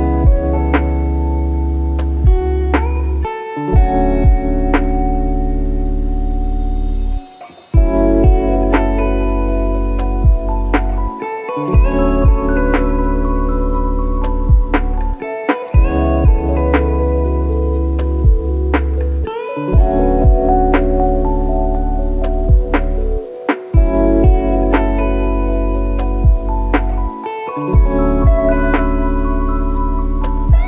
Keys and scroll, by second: 5.2 ctrl+e, 17.0 F1, 18.0 F1.